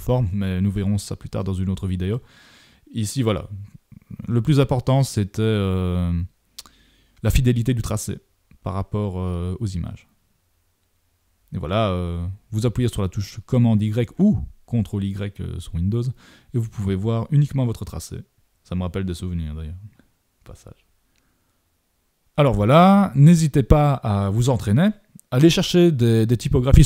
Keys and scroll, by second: 11.6 super+y, 12.7 super+=, 20.1 super+=, 22.2 super+=.